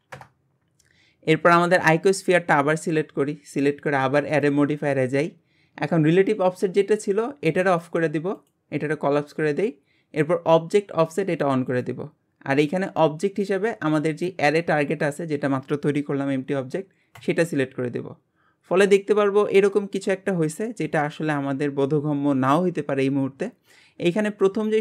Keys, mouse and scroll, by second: 1.3-2.2 scroll up 2, 2.2 click, 3.0-4.3 scroll down 1, 4.3 click, 7.6 click, 8.4-11.4 drag, 11.7 click, 13.6-16.7 drag, 18.3-18.8 scroll down 10, 19.7-20.1 scroll down 21, 20.4 scroll up 4, 21.2-22.7 middle drag, 22.7-23.1 scroll up 11, 24.0-24.5 scroll up 23.